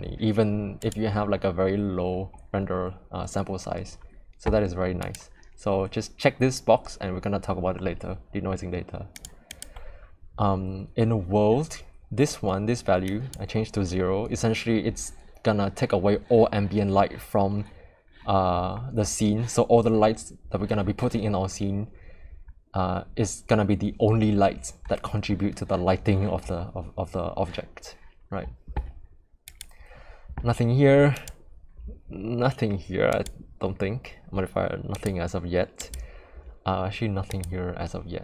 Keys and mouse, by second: 9.2 click, 9.5 click, 13.1 click, 29.6 click, 31.1 click, 34.9 click, 35.8 click.